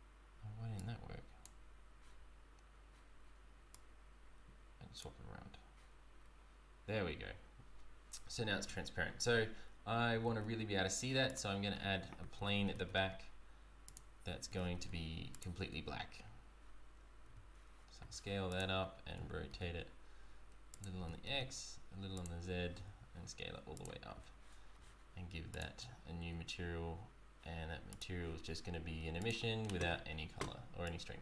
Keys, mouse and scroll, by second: 0.7 click, 2.8 scroll down 1, 3.8 click, 6.3 scroll up 2, 8.7 z, 9.6-10.1 scroll down 1, 10.2 shift+a, 12.3 g, 17.2 g, 18.5 s, 19.0 r, 20.9 r, 22.7 s, 25.5 click, 27.9 click, 30.8 click.